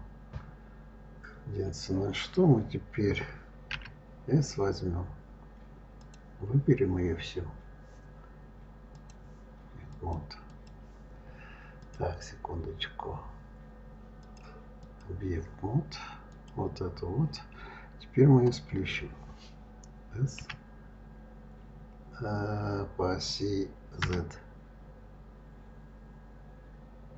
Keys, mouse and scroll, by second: 3.5 s, 5.8 click, 8.7-9.9 drag, 10.3 click, 11.6-16.3 drag, 20.2 s.